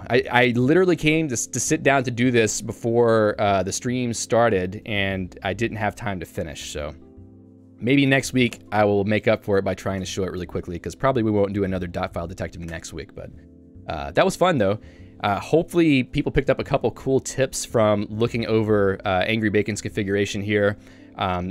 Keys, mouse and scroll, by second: 0.2 j, 4.8 Escape, 5.2 j, 7.8 a, 8.1 Escape, 10.1 Return, 10.4 Escape, 11.3 click, 11.6 click, 12.8 Escape, 16.2 shift+Tab, 16.6 shift+Tab, 17.2 Escape, 18.1 k, 20.5 j.